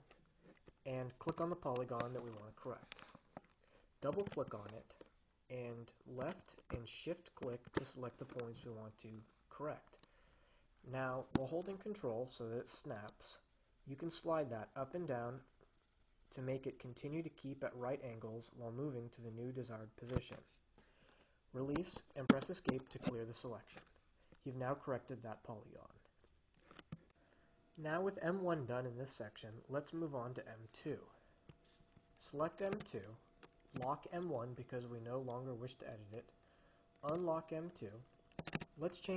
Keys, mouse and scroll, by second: 1.8 click, 4.4 click, 6.7 click, 7.9 shift+click, 13.1-21.1 ctrl+drag, 22.1 Escape, 33.0 click, 33.9 click, 36.0 click, 38.7 click.